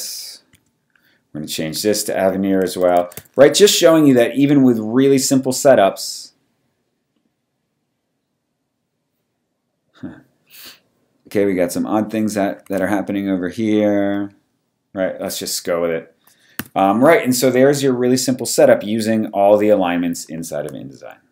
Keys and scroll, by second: 0.5 t, 2.4-3.6 typing, 12.6 super+a, 16.6 v.